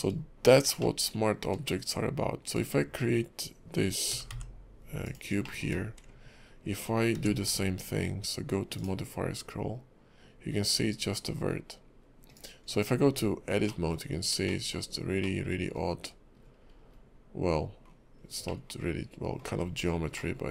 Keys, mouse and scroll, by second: 0.8 middle click, 2.5 click, 4.1 g, 5.4 scroll up 1, 5.5 shift+middle click, 5.7 shift+scroll down 1, 7.1 q, 13.1 Tab, 13.6 middle click, 14.5 shift+middle click, 15.2 middle click, 16.4-17.5 scroll up 7, 17.8-18.3 scroll down 8, 18.4 middle click, 19.5-20.1 scroll up 5, 20.1 middle click.